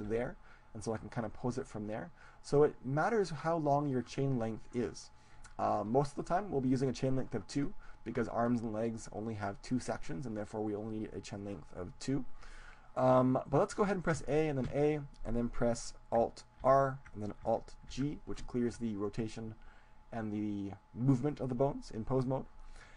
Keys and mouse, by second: 0.5 g, 3.2-8.0 drag, 8.0-9.5 middle drag, 14.2 a, 14.6 a, 16.7 alt+r, 17.8 alt+g.